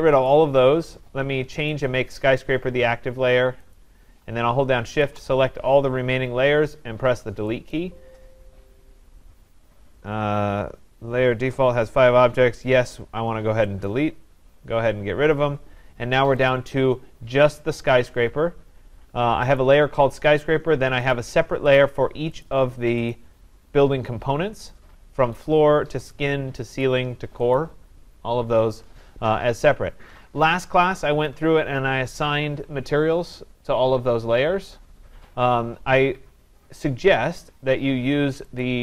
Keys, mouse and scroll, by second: 1.7 click, 3.7 click, 5.0 shift+click, 7.8 click, 13.9 click, 16.5 click, 19.6 click, 21.1 click, 21.8 click, 22.4 click, 23.1 click, 25.4 click, 26.1 click, 26.8 click, 27.6 click, 38.6 click.